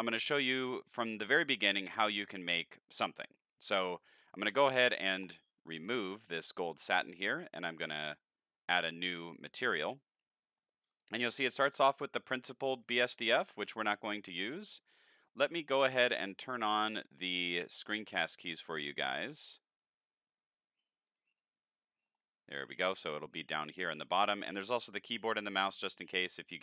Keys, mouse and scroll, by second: 0.8 click, 5.2 click, 8.1 click, 9.4 middle click, 10.1-10.6 middle drag, 10.9 click, 11.7 click, 13.5 shift+a, 14.9 click, 17.4 click, 17.8 click, 21.1 click, 22.0 middle click.